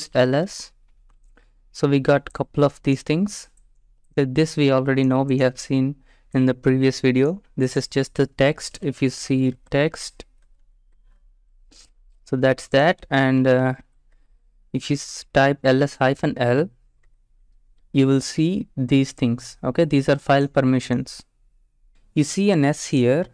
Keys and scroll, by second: 0.0-0.8 typing, 9.2-10.4 typing, 10.6 Tab, 10.8 Return, 13.0-16.2 typing, 17.1 Return.